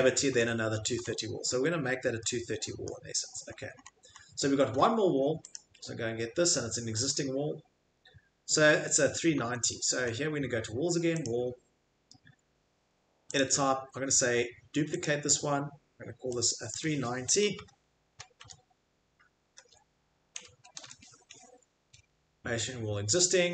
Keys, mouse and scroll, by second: 0.3 Escape, 0.4-2.9 scroll, 0.9 Escape, 2.9-3.4 scroll, 3.4-3.9 scroll, 4.1 middle click, 5.5 click, 7.1 click, 9.4 Escape, 9.9 Escape, 10.1 click, 11.2 click, 13.3 click, 15.1 click, 17.5 BackSpace, 18.1 BackSpace, 23.2 0.